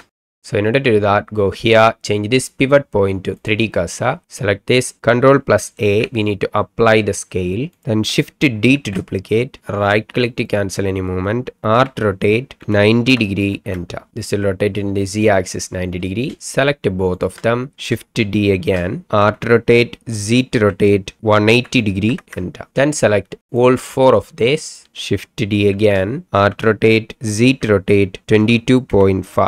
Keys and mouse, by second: 1.7-3.6 drag, 5.8 ctrl+a, 8.7 shift+d, 10.4 click, 11.8 r, 12.6 KP_9, 13.0 KP_0, 13.6 KP_Enter, 17.1 shift+click, 18.5 shift+d, 19.2 r, 20.5 z, 21.5 KP_1, 21.8 KP_8, 22.1 KP_0, 22.2 KP_Enter, 23.5 shift+drag, 24.6 shift+click, 25.7-29.2 typing.